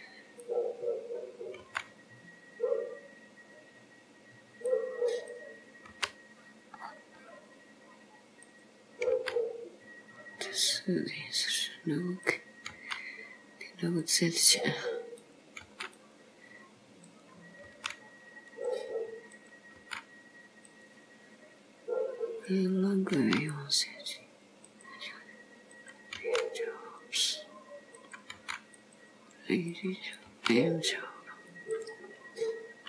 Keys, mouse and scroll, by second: 0.5 click, 1.8 g, 5.3 click, 6.0 g, 9.1 g, 12.2 click, 12.8 g, 15.2 click, 15.7 g, 17.1 click, 17.8 g, 19.4 click, 20.0 g, 22.5 click, 23.2 g, 25.8 click, 26.2 g, 28.1 click, 28.5 g, 29.8 click, 30.4 g, 32.7-32.8 scroll up 2.